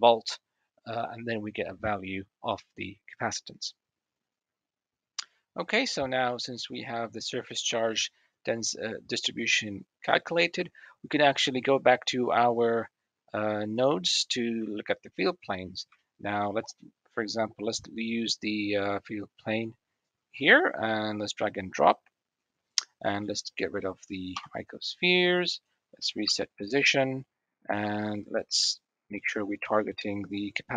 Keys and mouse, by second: 5.9-6.6 middle drag, 11.5 click, 15.6 shift+middle drag, 16.0 middle click, 18.9 click, 22.8 click, 24.9 Delete, 26.9 alt+g, 29.2 click.